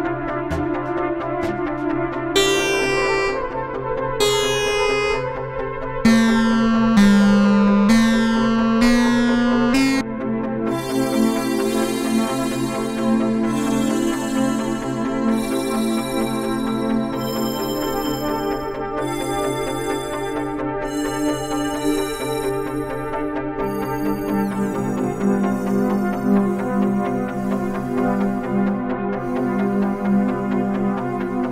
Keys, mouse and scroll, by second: 4.8-7.8 drag, 11.8-16.8 drag, 17.4 drag, 17.8-18.5 drag, 18.5 click, 19.2 click, 20.4 click, 22.4-26.9 drag, 27.0 click, 27.3 click, 27.5-29.1 drag, 29.3-31.5 drag.